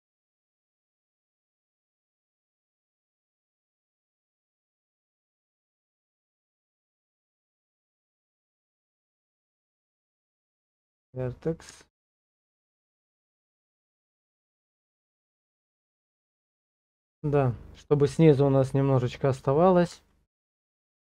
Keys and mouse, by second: 2.7 shift+z, 4.1-8.7 drag, 11.7 Tab, 12.4 middle click, 12.9 shift+z, 13.4 shift+middle click, 13.8 middle click, 14.8 KP_0, 20.1 shift+middle click.